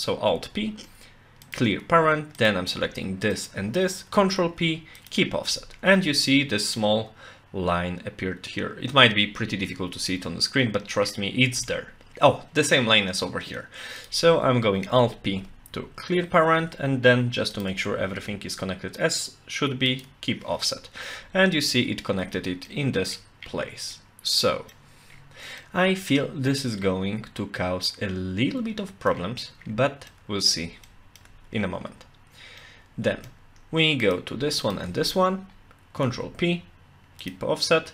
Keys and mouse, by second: 0.3 alt+p, 2.4 click, 3.4 shift+click, 4.4 ctrl+p, 11.7 shift+middle click, 14.0 click, 15.3 alt+p, 17.6 shift+click, 18.0 ctrl+p, 22.7 middle click, 23.9 middle click, 25.6-29.1 middle drag, 30.1 middle click, 30.9 shift+middle click, 32.6 middle click, 34.0 click, 34.6 shift+click, 36.2 ctrl+p.